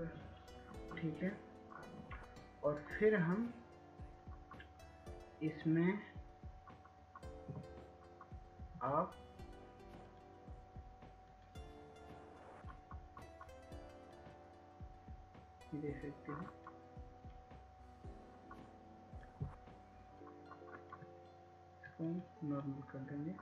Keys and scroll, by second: 0.9 typing, 1.2 Tab.